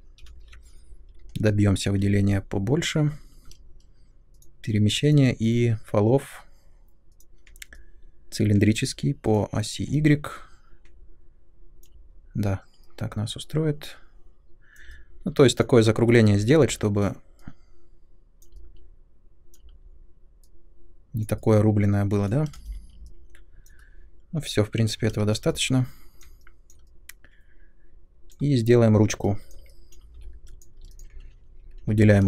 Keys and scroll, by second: 0.2 shift+Up, 3.4 w, 22.5 space, 24.9 Escape, 30.1 3, 31.8 |.